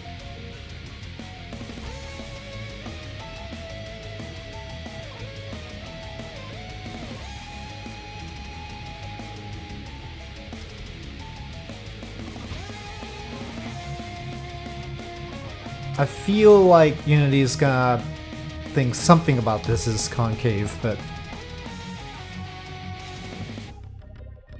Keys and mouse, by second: 0.6-3.7 drag, 4.3 click, 4.8 shift+click, 5.8-9.3 drag, 9.6 middle click, 11.2-12.4 drag, 12.9 middle click, 13.8-16.7 middle drag, 17.5-18.9 middle drag, 19.6 KP_Divide, 21.0-21.5 middle drag.